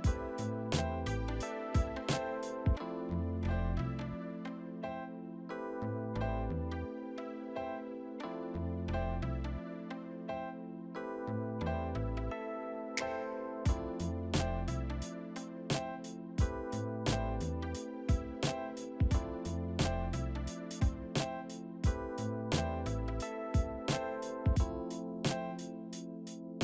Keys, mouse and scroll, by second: 0.4 alt+w, 1.4 alt+shift+scroll down 1, 1.5 alt+shift+middle click, 2.5 right click, 3.0 double click, 5.3 alt+w, 5.9 middle click, 8.2 alt+middle click, 10.8 t, 12.5 alt+w, 13.7 alt+shift+middle click, 15.6 alt+shift+middle click, 19.5 alt+shift+middle click, 20.2 alt+shift+middle click, 21.1 alt+shift+middle click, 21.7 alt+shift+middle click, 24.3 double click, 25.3 alt+shift+middle click.